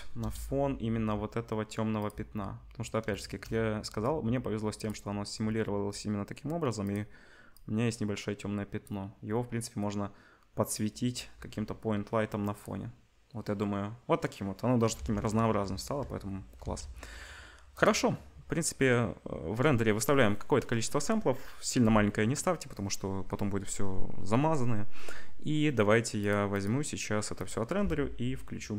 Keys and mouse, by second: 0.2 KP_0, 0.9 g, 4.0 g, 7.5-12.6 drag, 11.3 g, 15.0 ctrl+s, 15.6 z, 16.6 ctrl+s, 17.7 click, 26.2 click, 26.6 click, 27.3 click.